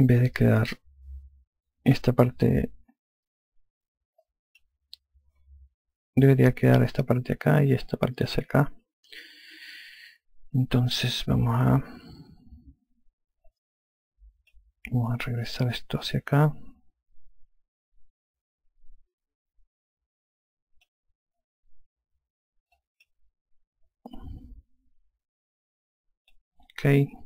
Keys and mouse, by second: 0.1 alt+click, 5.1 click, 10.7 F2, 14.3 click, 16.5 click, 23.6 click.